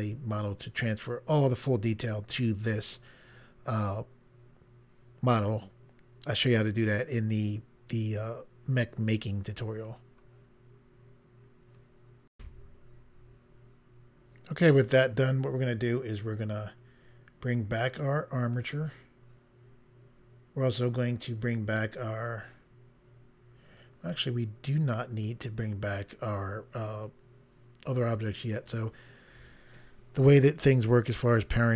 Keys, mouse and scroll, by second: 12.3 Pause, 18.5 click.